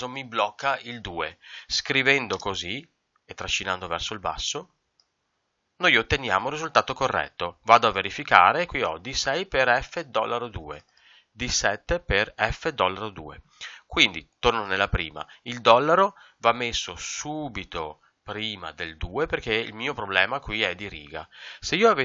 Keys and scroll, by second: 2.3 ctrl+Return, 10.1 Escape, 13.4 Escape.